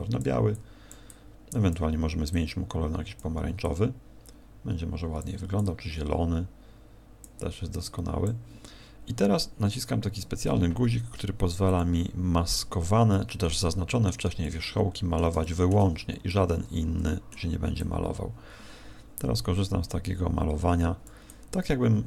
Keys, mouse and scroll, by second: 0.2 click, 0.5 click, 1.0 click, 2.2 click, 3.6 click, 5.5 click, 7.8 click, 11.6 click, 13.1 middle click, 14.4 middle click, 15.4 shift+middle click, 15.8 scroll down 3, 16.2 middle click, 17.8 click, 21.2 click.